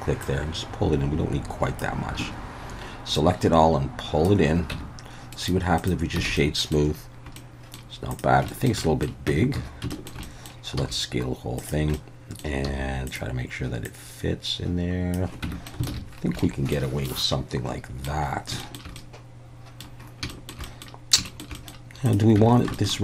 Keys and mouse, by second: 0.3-1.8 drag, 2.2 a, 3.2-4.3 drag, 4.7 Tab, 5.4 right click, 6.3 alt+a, 6.4-6.8 middle drag, 7.4-7.8 middle drag, 8.2 drag, 8.5 shift+middle drag, 8.9 middle click, 9.3 Tab, 9.6 a, 9.9 shift+middle click, 10.2 middle click, 10.8 s, 11.6 click, 12.0 middle click, 13.1 click, 13.1 s, 13.9-15.2 drag, 15.5 Tab, 15.7 alt+middle click, 16.0 alt+a, 16.4-16.7 middle drag, 17.1-18.1 middle drag, 18.6 shift+middle drag, 19.0-19.8 middle drag, 20.3 shift+middle click, 20.7 middle drag, 21.3 shift+middle drag, 21.6 middle click, 22.4 Tab, 22.8 shift+click.